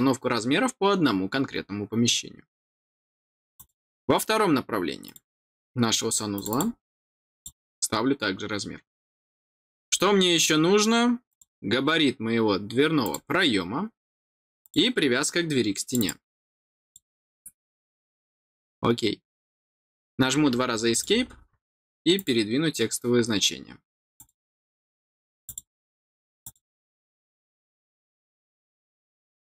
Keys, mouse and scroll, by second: 3.5 click, 5.0 click, 6.3 click, 7.3 click, 9.4 scroll down 1, 9.8 middle click, 11.2 click, 12.9 click, 14.5 click, 15.8 click, 15.9 click, 16.8 click, 17.6-18.0 scroll down 2, 18.4 scroll up 1, 20.8 click, 22.1 click, 24.1 click, 25.4 click, 26.3 click, 27.6 middle click, 29.4 click.